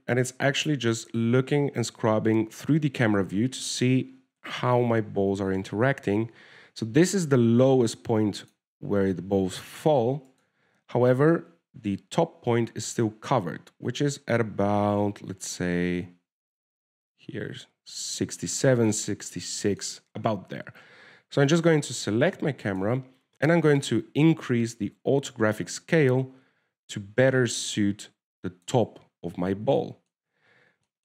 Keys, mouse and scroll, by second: 11.6 right click, 13.5 click, 20.5-20.8 scroll down 3, 20.8 shift+middle click, 22.8 right click, 23.3 shift+click, 25.5 shift+click.